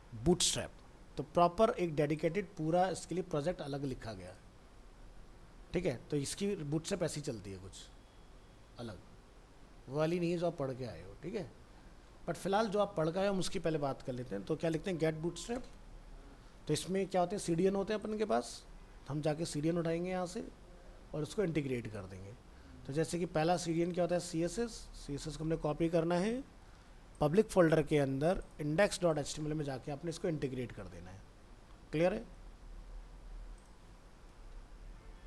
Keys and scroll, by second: 24.4 ctrl+c.